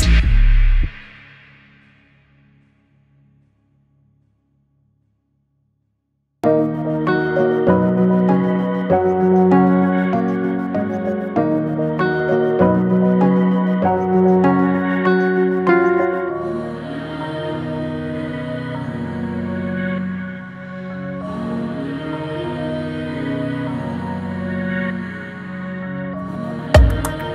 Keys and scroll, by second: 16.9 ctrl+j, 17.4 ctrl+t.